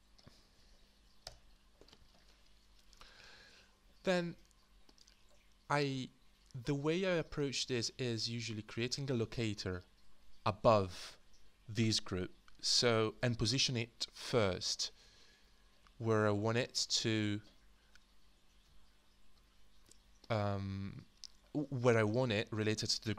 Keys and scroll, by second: 1.2 Return, 1.2 typing.